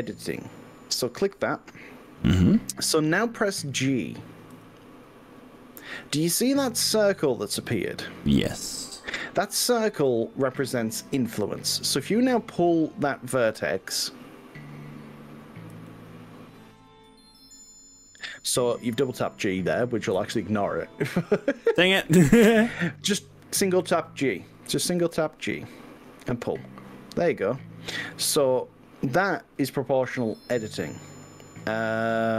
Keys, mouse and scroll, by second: 0.6 click, 4.6 g, 5.8-7.2 scroll up 9, 7.6-8.7 scroll down 9, 9.1 scroll down 2, 9.5-11.6 scroll up 11, 11.6-12.0 scroll down 2, 12.2-12.6 scroll up 2, 12.6-13.0 scroll down 2, 14.0 scroll up 2, 15.8 g, 19.8 click, 20.2 ctrl+z, 21.6 scroll up 2, 22.0 scroll down 2, 25.0 g, 28.9-30.8 scroll up 11, 31.7-32.3 scroll down 6.